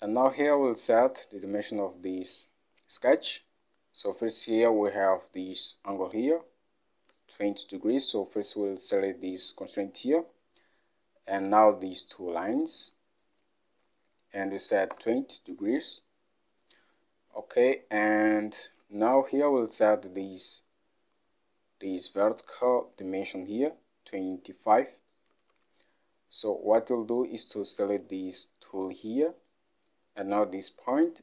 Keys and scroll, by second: 0.4 alt+Tab, 14.5-15.2 typing, 15.0 Return, 18.9 alt+Tab, 25.5 alt+Tab.